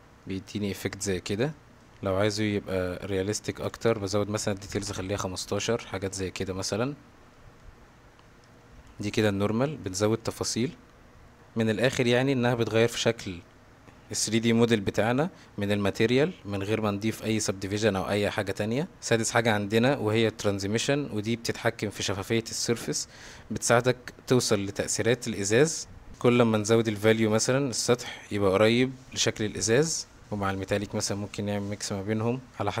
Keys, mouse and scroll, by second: 0.2-1.0 middle drag, 1.5 middle drag, 3.6-4.8 drag, 5.9-6.5 middle drag, 7.4 middle click, 8.4 click, 9.1 x, 9.6 middle click, 10.2 middle drag, 12.4-13.4 middle drag, 27.1-30.2 drag, 30.9-32.8 drag.